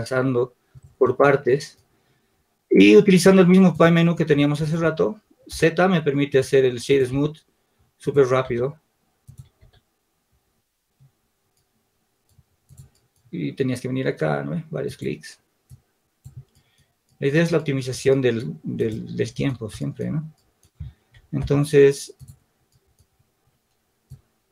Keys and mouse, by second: 5.4 z, 14.0-17.2 drag, 18.9-20.8 drag, 21.7 Tab, 24.0 click.